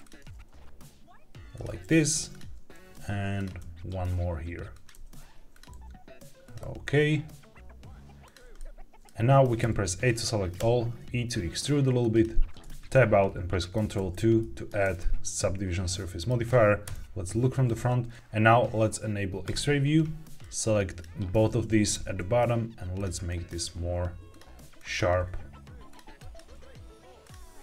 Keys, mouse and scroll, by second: 0.1 g, 1.4 click, 2.2 shift+click, 2.6 e, 3.3 click, 3.5 s, 4.6 click, 4.8 g, 5.4 click, 5.6 s, 6.3 click, 6.5 g, 8.1 click, 8.5 middle click, 9.5 a, 10.5 e, 11.9 click, 12.5 Tab, 13.9 ctrl+2, 14.9-16.2 middle drag, 16.8 KP_1, 17.7 Tab, 18.1 Escape, 18.1 click, 18.1 g, 19.3 click, 20.3 click, 21.9 g, 22.9 click, 23.2 click, 23.5 g, 24.2 click, 24.7 click, 25.0 g, 25.8 click, 26.1 click, 26.3 g, 27.1 click, 27.5 click.